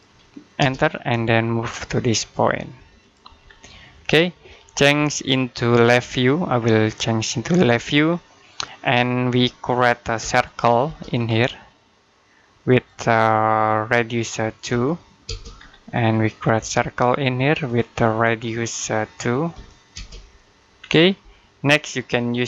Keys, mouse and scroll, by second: 0.4 space, 2.8 click, 3.3-3.7 scroll down 1, 3.7 middle click, 5.5 click, 7.9-8.3 scroll down 1, 8.3 middle click, 8.7-10.0 scroll up 1, 10.0 c, 10.7 space, 11.0 scroll up 1, 12.6 click, 14.5 2, 15.1 space, 15.4 scroll down 1, 15.7 middle click, 16.4 space, 16.5-17.5 scroll down 1, 17.5 click, 19.4 2, 19.8 space, 20.6-21.2 scroll up 1, 21.2 middle click.